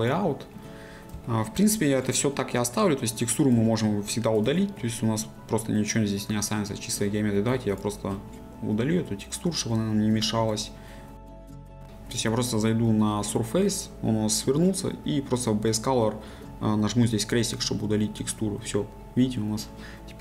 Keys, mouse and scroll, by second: 0.0 click, 0.5 scroll down 1, 1.2 shift+middle click, 1.7-3.0 scroll down 1, 3.0-4.1 middle drag, 4.1-4.5 scroll up 1, 4.5 shift+middle click, 4.9-6.5 scroll up 1, 6.5-7.7 scroll down 1, 11.8 z.